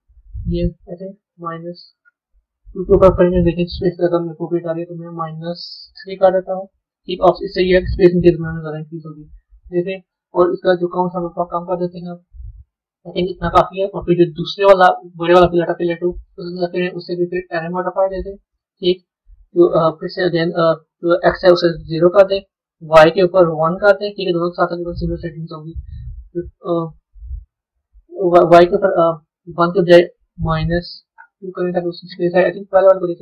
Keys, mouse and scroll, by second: 5.0-8.1 drag, 11.4-15.0 drag, 16.4-19.4 drag, 20.9-25.8 drag, 28.3-31.4 drag, 33.1 click.